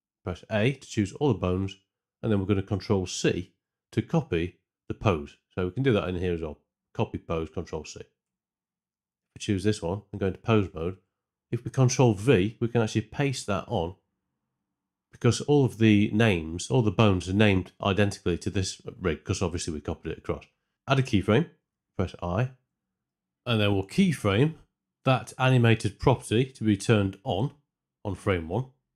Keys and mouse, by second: 0.2 a, 3.4 ctrl+c, 5.8-8.3 drag, 9.1 Tab, 10.2 Tab, 10.9 a, 13.7 ctrl+v, 22.4 i, 22.6 shift+Left, 23.1 Tab, 28.4 click.